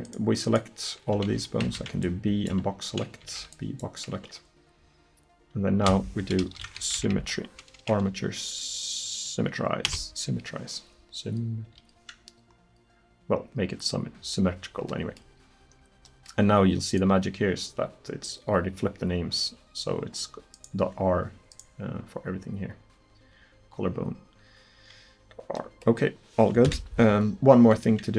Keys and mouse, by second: 1.7 b, 2.1 click, 3.3 b, 5.9 space, 7.2 m, 12.5-15.2 middle drag, 16.9 right click, 18.9-20.6 middle drag, 22.2-24.2 drag, 24.2 middle click, 25.2 middle click, 26.7 KP_1.